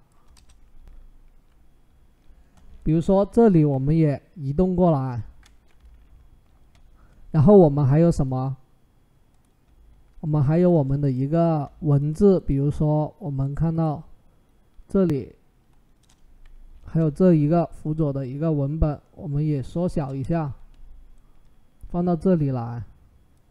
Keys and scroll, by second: 0.1 Return, 15.8 Return, 16.6 ctrl+t, 19.9 Return.